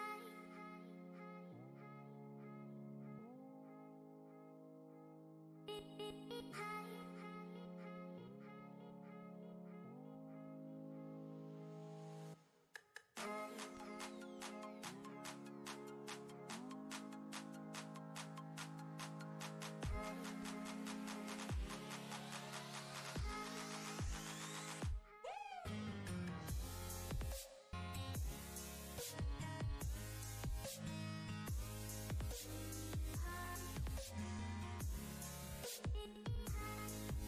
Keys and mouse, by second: 0.1 shift+space, 0.6 ctrl+space, 0.6-1.8 ctrl+click, 1.2 space, 1.4 click, 3.3-5.2 alt+shift+drag, 8.0 ctrl+space, 8.2-9.1 ctrl+drag, 10.4-11.0 alt+shift+click, 13.3 ctrl+space, 13.4-16.9 ctrl+click, 14.0 ctrl+space, 18.6-20.3 drag, 20.3 ctrl+space, 21.7-23.1 alt+shift+drag, 30.1 click, 32.8 ctrl+space, 32.9-33.5 ctrl+click, 34.3 click, 36.2-37.2 typing.